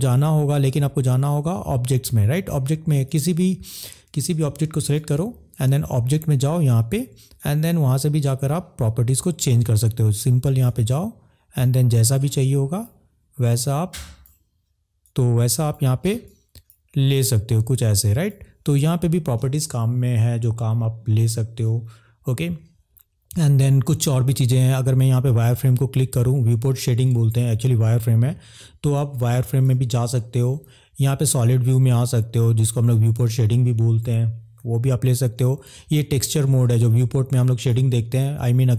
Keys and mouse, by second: 3.0 click, 4.7 click, 7.4-8.6 drag, 10.6-11.8 drag, 12.5 click, 13.5 click, 15.0 click, 16.4 click, 17.2-18.3 drag, 20.7 middle click, 28.6 middle click, 33.2 click, 38.2 click.